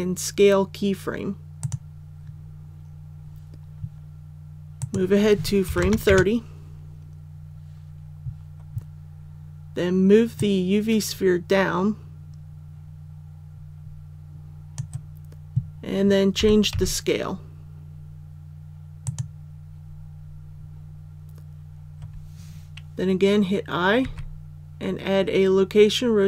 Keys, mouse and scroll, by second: 1.6 click, 5.6 KP_3, 5.8 KP_0, 10.3-15.5 drag, 16.3 s, 16.7 z, 19.0 click, 24.0 i.